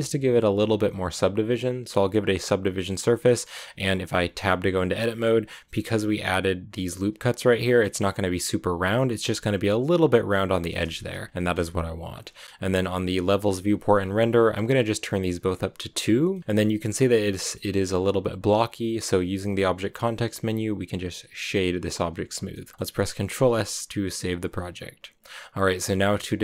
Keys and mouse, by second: 3.2 middle drag, 4.2 Tab, 4.8 middle click, 6.3 click, 7.5-8.6 drag, 9.9 click, 10.2 click, 10.9 ctrl+z, 11.3 click, 11.4 Tab, 16.2 click, 19.1 w, 22.7 click, 23.1 ctrl+s.